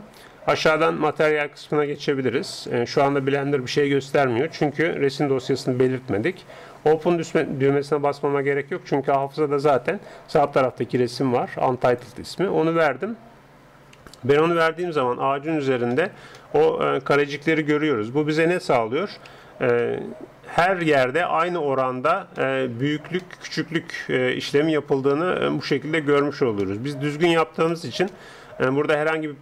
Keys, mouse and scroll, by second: 1.1-11.0 drag, 14.3 ctrl+Up, 15.6-19.3 middle drag, 19.3 a, 19.8-29.4 middle drag.